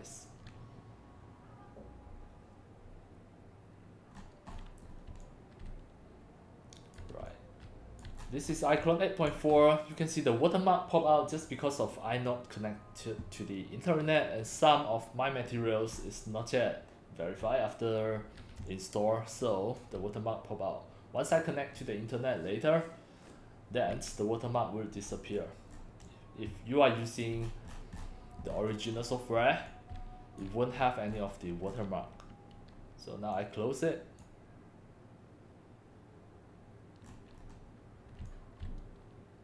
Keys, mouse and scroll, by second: 4.1-4.6 scroll up 2, 4.9 scroll down 1, 5.1 x, 5.2-6.9 drag, 5.6 c, 7.2 x, 7.3-8.0 drag, 8.2-8.6 scroll down 6, 8.9-9.3 drag, 9.6 scroll up 4, 16.0 scroll up 3, 18.6 c, 18.7-19.9 drag, 25.1 scroll up 5, 25.7 scroll down 3, 26.1-27.2 drag, 26.1 x, 27.4-28.1 scroll down 4, 28.5-29.1 scroll up 4, 29.4 x, 29.7-30.4 drag, 30.7-31.3 scroll up 3, 31.7-32.2 scroll down 3, 33.3 click, 37.1-37.4 scroll down 4, 38.2 x, 38.3-39.4 drag, 38.6 c.